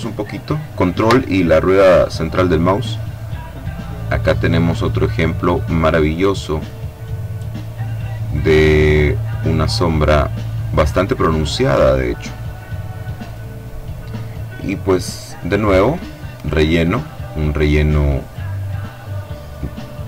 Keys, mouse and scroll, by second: 0.5-1.0 ctrl+scroll down 1, 4.1 click, 5.0 click, 5.7 click, 6.3-7.3 drag, 7.7 click, 8.4 click, 9.3 click, 10.8-11.9 drag, 12.0-13.2 drag, 13.4 click, 16.2 click, 18.4 click.